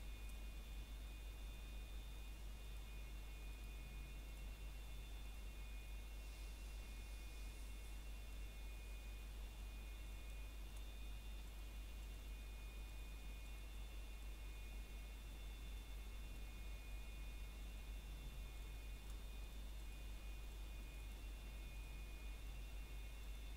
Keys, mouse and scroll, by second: 0.6 scroll down 1, 0.8 middle click, 1.4 scroll up 1, 2.0 middle click, 2.2 scroll up 1, 4.7 scroll down 1, 5.0 middle click, 5.4 scroll up 1, 6.4 click, 8.2 shift+click, 9.7 scroll down 1, 9.8 middle click, 10.7 click, 12.2 scroll down 1, 12.3 middle click, 12.9 scroll up 1, 13.1 middle click, 14.0 scroll up 1, 14.6 click, 15.4 ctrl+click, 18.1-18.5 scroll down 1, 21.1 middle click, 21.7 scroll down 1, 22.0 middle click, 22.4 shift+middle click, 22.5 scroll up 1, 23.2 click.